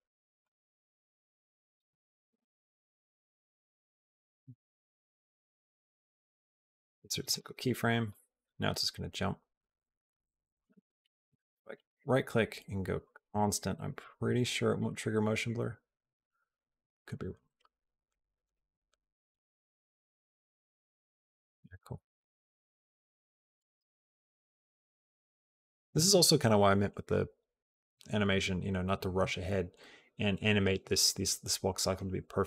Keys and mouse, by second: 0.2-5.3 drag, 5.9 right click, 7.1 click, 7.9-10.5 drag, 10.6 click, 11.5 right click, 13.1 click, 13.9-23.6 drag, 23.6 space.